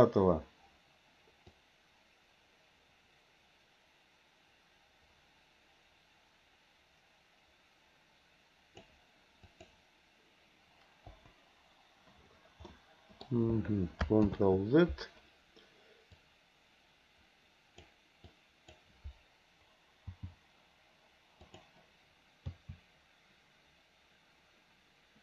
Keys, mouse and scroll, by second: 1.5-8.8 drag, 9.4 click, 11.1 Delete, 12.6 middle click, 14.3 ctrl+z, 16.2-17.9 drag, 18.2 click, 20.1 g, 22.5 a.